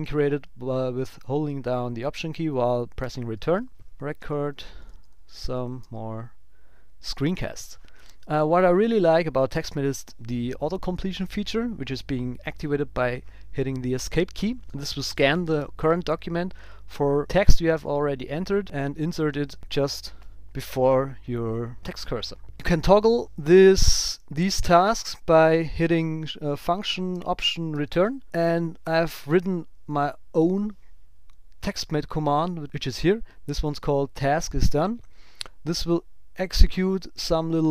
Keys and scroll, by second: 3.0 alt+Return, 3.9 shift+r, 12.6 Escape, 23.9 Return, 24.3 Up, 27.7 alt+Home, 29.5 super+s, 30.3 ctrl+alt+super+b.